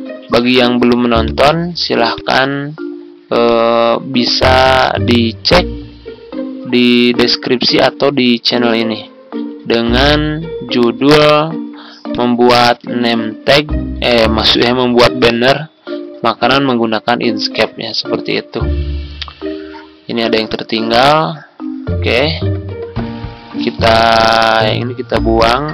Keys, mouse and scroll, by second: 1.2 ctrl+shift+click, 2.0 click, 3.1 ctrl+z, 3.4 click, 5.0 shift+click, 8.6 click, 9.4 ctrl+z, 12.1 click, 12.7 ctrl+z, 16.0 ctrl+c, 20.4-21.5 shift+drag, 24.6 ctrl+click, 25.6-25.7 drag.